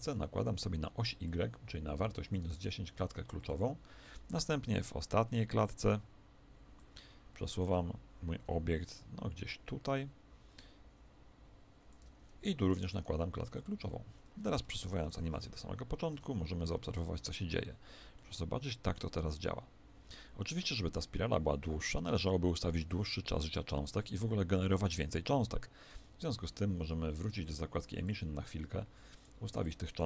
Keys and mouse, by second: 12.9-15.0 middle drag, 15.0 shift+Left, 16.1 alt+a, 18.1-25.8 middle drag, 25.8 Escape, 27.9-30.0 drag.